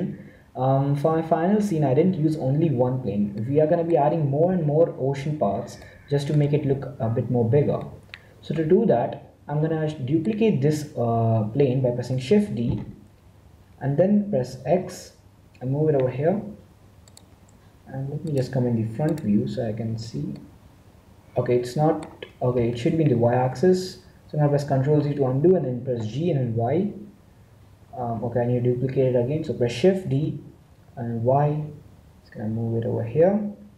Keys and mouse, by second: 3.4-11.8 middle drag, 12.6 shift+d, 20.3-21.5 middle drag, 22.8 ctrl+z, 25.9 g, 30.2 shift+d.